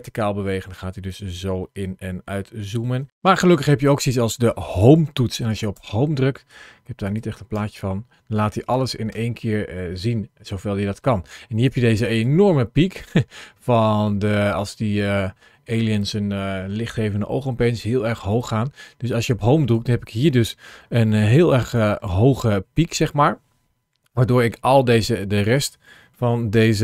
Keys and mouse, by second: 7.4 Home, 8.4 click, 8.9 Home, 11.5 click, 13.5-15.8 drag, 18.1 click, 19.1 click, 21.2 click, 21.7 ctrl+shift+a.